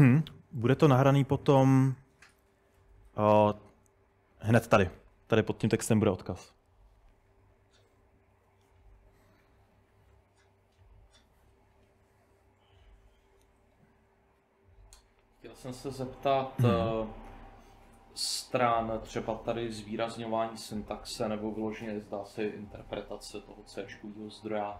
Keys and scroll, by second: 0.8 super+Tab, 1.2 super+Tab, 1.4 super+Tab.